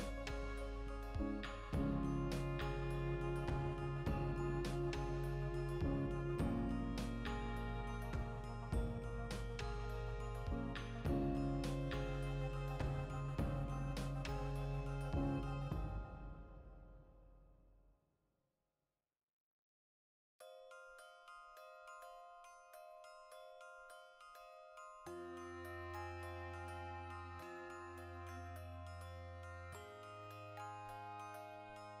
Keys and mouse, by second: 0.0 ctrl+z, 0.2 ctrl+shift+middle click, 0.9 alt+right click, 1.1-2.2 ctrl+shift+middle drag, 1.7 g, 2.2 click, 2.7 ctrl+r, 3.1 right click, 3.6 f, 3.9 shift+middle click, 4.5 right click, 4.8 ctrl+shift+middle click, 5.2 shift+right click, 5.8 f, 6.0-7.5 ctrl+shift+middle drag, 7.5-9.6 right drag, 10.1 right click, 10.6 f, 12.2 right click, 12.4 f, 13.9 right click, 14.1 f, 14.8-32.0 ctrl+middle drag, 21.4 Tab, 21.8 \, 23.1 alt+q, 26.4 alt+q, 30.7 g, 31.2 right click, 31.7 Tab.